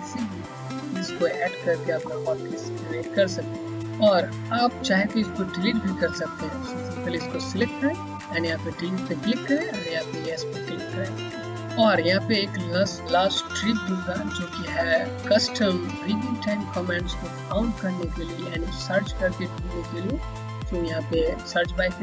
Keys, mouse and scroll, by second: 3.9 click, 20.9 click.